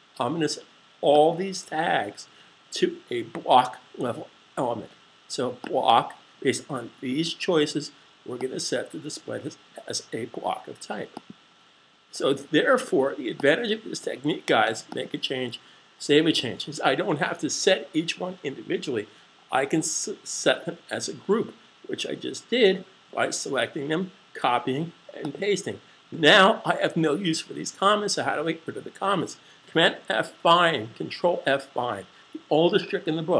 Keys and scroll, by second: 16.2 super+s.